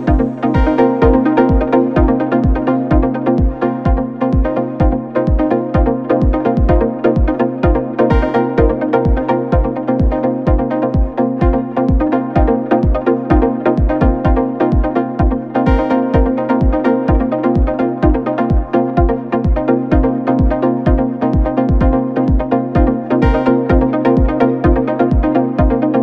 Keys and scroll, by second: 0.5 3, 0.8 ], 1.2 ], 2.4 4, 9.5 Delete, 11.3 ], 25.0 4.